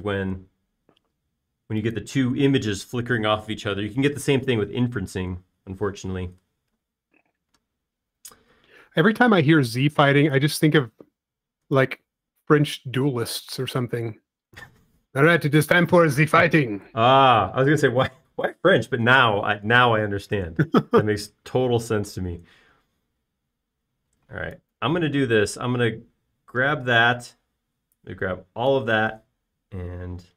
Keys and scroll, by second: 7.3 p, 13.9 f, 18.4 Escape, 21.5 p, 26.5 space.